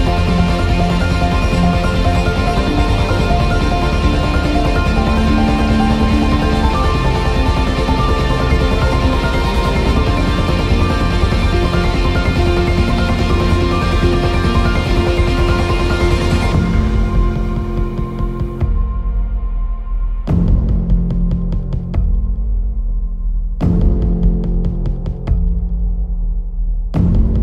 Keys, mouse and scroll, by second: 0.8 click, 1.8 scroll down 1, 2.1 shift+middle click, 2.9-10.1 drag, 10.4 Tab, 11.1 click, 11.9 click, 12.3-13.6 right drag, 13.6 click, 14.6 scroll up 1, 16.2-16.6 scroll down 1, 16.7-20.0 middle drag, 18.2 KP_0, 20.0 scroll up 1, 21.2 scroll down 1, 22.6 click, 25.4 click, 26.6 scroll down 1.